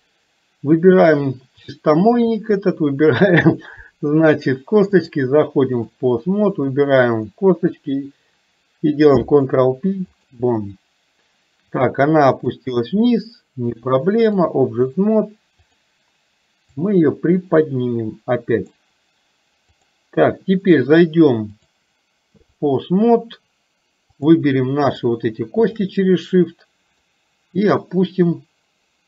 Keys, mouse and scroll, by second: 2.0 click, 5.2 click, 9.3 ctrl+p, 12.7-14.4 drag, 15.7 click, 17.0-18.8 drag, 21.5-22.8 drag, 24.3 click, 25.7 shift+click, 27.2-29.0 drag.